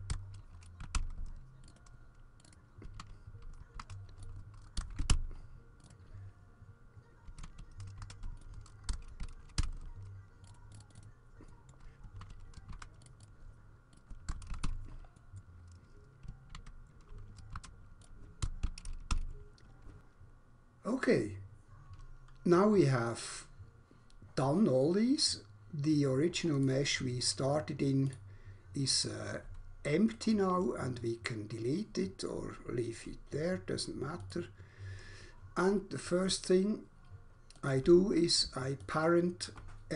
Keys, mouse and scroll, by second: 0.1 BackSpace, 0.9 Return, 0.9 4, 1.7 click, 1.7 click, 2.0 click, 2.4 click, 2.5 click, 3.0 alt+F1, 3.8 ctrl+v, 4.2 click, 4.6 click, 4.8 typing, 5.1 Return, 5.8 click, 5.9 double click, 7.4 alt+F1, 8.0 ctrl+v, 8.4 click, 8.9 typing, 9.6 Return, 10.5 click, 10.5 click, 10.6 click, 10.9 click, 11.7 middle click, 12.2 alt+F1, 12.7 ctrl+v, 13.0 click, 13.5 click, 14.0 click, 14.3 BackSpace, 14.5 7, 14.6 Return, 15.2 middle click, 15.4 middle click, 16.5 alt+F1, 17.6 ctrl+v, 18.3 click, 18.3 BackSpace, 18.6 8, 19.1 Return, 26.5 click, 28.1 click, 30.1 right click, 34.1 click, 37.3 click, 38.8 shift+click.